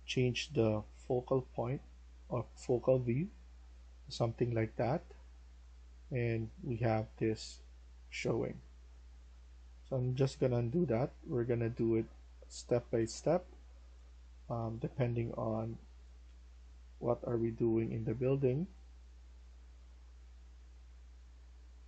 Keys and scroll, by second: 9.7 ctrl+z, 10.5-11.3 typing, 12.6-16.7 typing.